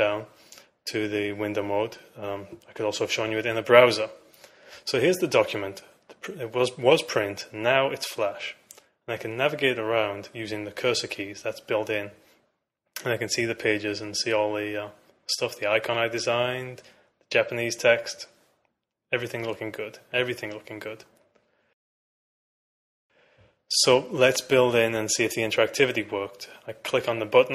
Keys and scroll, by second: 11.2 Right, 12.5 Left, 16.6 Right, 19.0 Right, 21.8 Left.